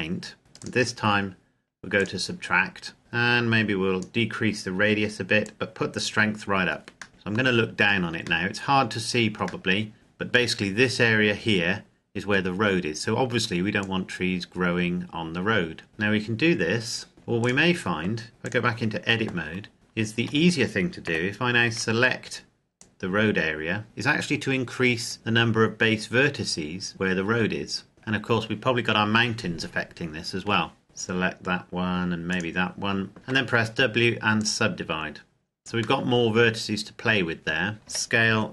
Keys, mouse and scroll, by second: 0.7 click, 7.1 middle click, 8.9 middle click, 9.9 shift+middle click, 9.9-11.6 scroll up 1, 13.9 click, 17.5 right click, 18.3 click, 20.3 a, 21.1 c, 21.7-22.9 scroll up 1, 22.9 click, 30.8 shift+right click, 33.3 w, 34.5 click, 36.1 middle click, 37.9 s.